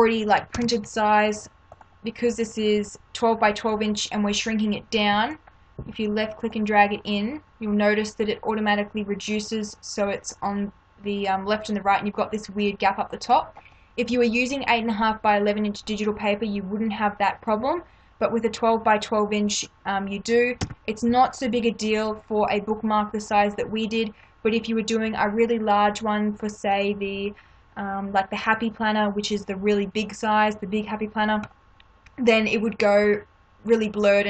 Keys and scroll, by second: 0.5 ctrl+-, 6.6 space, 20.6 Return.